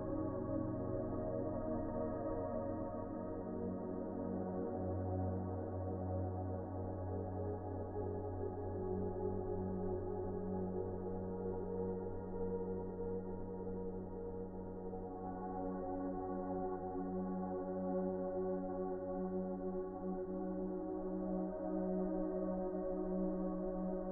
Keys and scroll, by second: 1.1 1, 15.2 F4, 18.8 c.